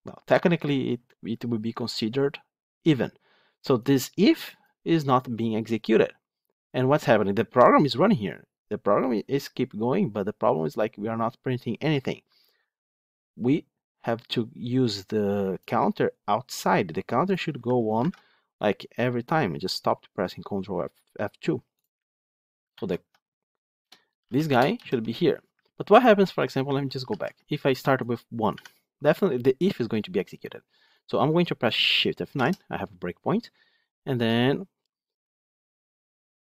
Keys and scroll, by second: 18.0 ctrl+F2, 22.6 ctrl+x, 24.6 ctrl+v, 25.5 ctrl+z, 26.1 ctrl+z, 27.0 ctrl+z, 30.8 ctrl+F8, 32.2 shift+F9.